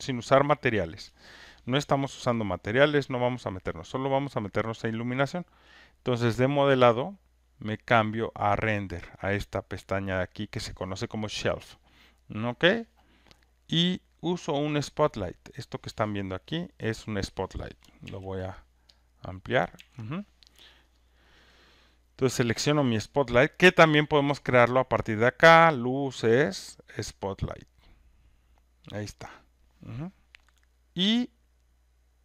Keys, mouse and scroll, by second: 6.3 click, 8.5 click, 12.3-13.6 drag, 18.0 ctrl+F1, 19.0 click, 19.8 ctrl+F1, 21.0 click, 22.2 click, 24.7 click.